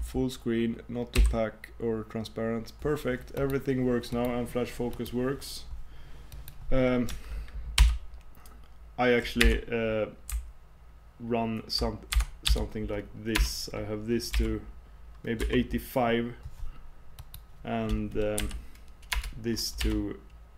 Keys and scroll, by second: 1.2 super+m.